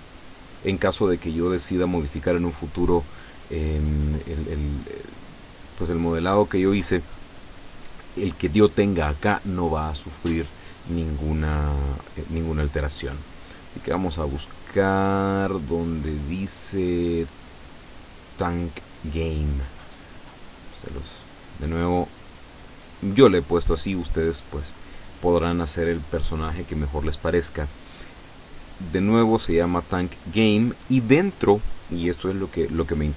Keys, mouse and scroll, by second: 5.3 click, 12.0 click, 14.4-16.8 drag, 18.6 click, 20.9 click, 23.6-25.6 drag, 30.5 click.